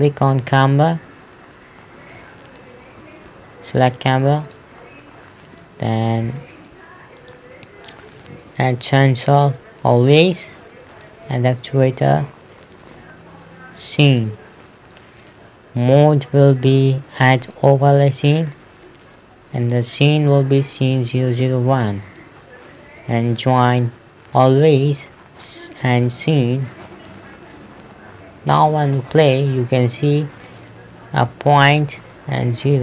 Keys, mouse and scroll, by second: 0.4 right click, 1.8 middle click, 3.8 z, 4.9 click, 5.5 middle click, 6.4 scroll up 1, 6.9 middle click, 7.7 right click, 9.1 click, 14.6 click, 28.3 KP_0, 29.0 p.